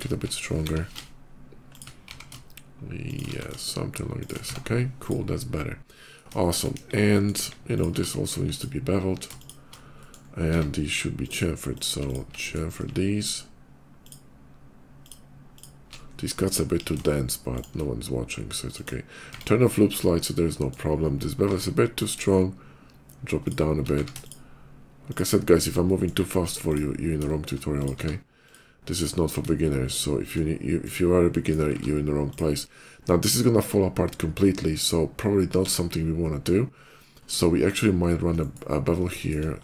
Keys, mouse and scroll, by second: 0.0-0.6 typing, 1.6 click, 1.9 e, 2.9 click, 3.1 s, 4.0 click, 4.2 Tab, 4.9 click, 5.1 middle click, 6.2 shift+middle click, 6.6 KP_5, 6.9 middle click, 7.3 KP_5, 7.6 click, 7.7 q, 8.2 click, 9.2 click, 9.6 shift+middle click, 9.6 scroll down 1, 9.7 shift+middle click, 10.2 Tab, 11.0 click, 11.6 click, 11.9 alt+click, 12.1 alt+middle click, 12.9 alt+shift+click, 13.9 alt+shift+click, 14.8 alt+shift+click, 15.4 alt+shift+click, 15.9 alt+shift+middle click, 16.0 alt+shift+middle click, 16.4 ctrl+b, 17.4 click, 18.6 shift+click, 19.1 Tab, 19.6 middle click, 20.8 middle click, 21.1 q, 21.8 click, 23.3 shift+click, 23.7 q, 24.1 click, 24.9 click, 25.7 shift+middle click, 26.4 shift+click, 27.1 shift+middle click, 27.6 shift+click, 27.8 q, 28.2 click, 30.6 shift+right click, 31.1 shift+middle click, 31.4 q, 32.1 click, 35.5 1, 38.2 shift+right click, 39.0 shift+middle click, 39.2 shift+middle click, 39.4 q.